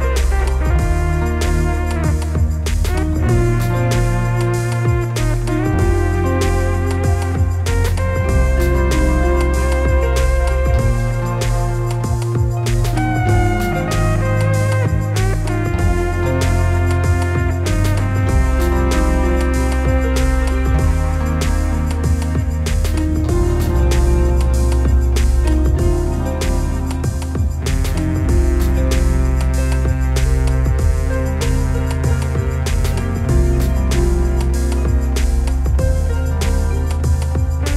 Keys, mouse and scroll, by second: 6.0-10.6 drag, 10.6 shift+d, 14.2-17.3 drag, 15.6 scroll up 1, 18.2 click, 20.4-24.0 drag, 25.0 click, 25.2 ctrl+shift+click, 26.5 click, 28.6 click, 29.6-34.6 drag, 31.5-31.9 scroll down 1, 32.2 KP_0, 33.2 scroll up 1, 36.0 click, 36.4-36.8 scroll down 1, 36.9 KP_0, 37.3-37.7 scroll up 2.